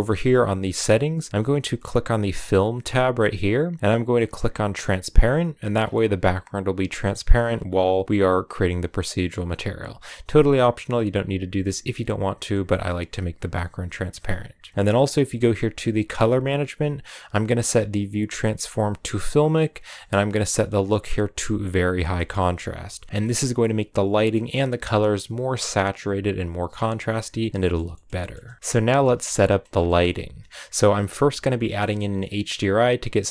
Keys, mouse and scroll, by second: 3.2-5.1 drag, 5.7 scroll down 4, 7.3-7.7 scroll up 3, 12.4-14.6 middle drag, 14.6-17.2 drag, 20.3-23.2 drag, 27.5-28.6 shift+middle drag, 28.6-29.0 scroll down 2, 29.0-32.8 middle drag.